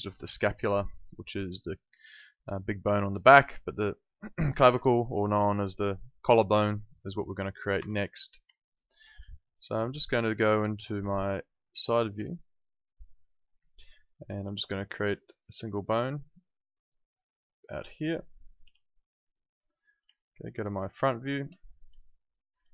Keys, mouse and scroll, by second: 7.8 Escape, 8.6 alt+middle click, 11.0 space, 11.2 click, 12.2 alt+middle click, 12.8 alt+right click, 13.8 alt+middle click, 14.2 alt+right click, 15.5 click, 18.6 w, 20.1 alt+middle click, 20.6 space, 20.7 click, 22.0 alt+middle click.